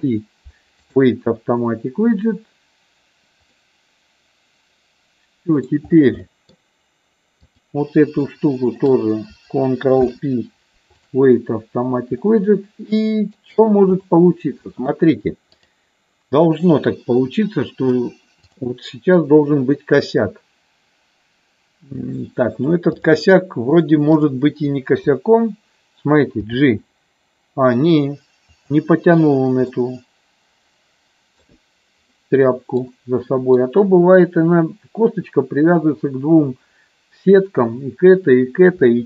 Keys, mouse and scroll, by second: 3.5-5.7 middle drag, 6.3 middle click, 7.6 click, 9.9 ctrl+p, 12.2-13.3 middle drag, 18.4-23.0 drag, 24.1-25.2 drag, 26.3 g, 29.7-31.4 middle drag, 32.0 middle click, 33.0 middle click.